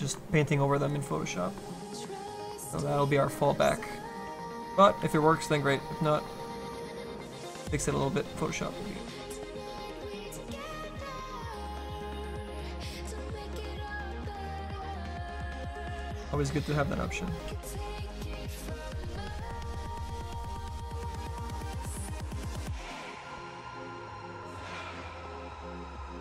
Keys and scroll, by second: 5.0 s.